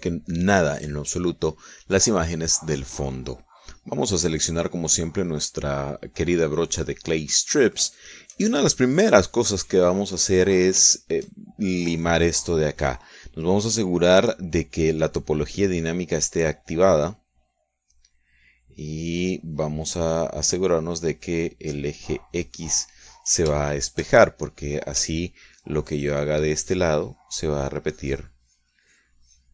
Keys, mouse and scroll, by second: 3.6 click, 5.7 click, 7.4-8.7 middle drag, 9.0-11.8 shift+middle drag, 11.8 scroll up 1, 12.0 shift+middle click, 12.5-12.8 shift+scroll up 1, 15.9 click, 17.1 click, 19.0-21.0 drag, 21.4 click, 22.8-24.1 drag, 24.7-26.0 shift+middle drag, 26.6-29.5 ctrl+drag.